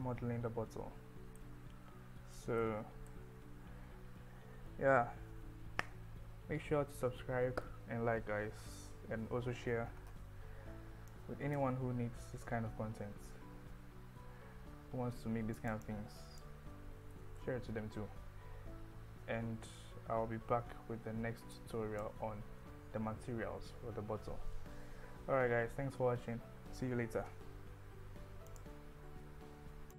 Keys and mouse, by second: 1.4-3.1 middle drag, 3.4 KP_1, 11.1 click, 15.6 click, 15.9 click, 17.3 ctrl+z, 21.6 click.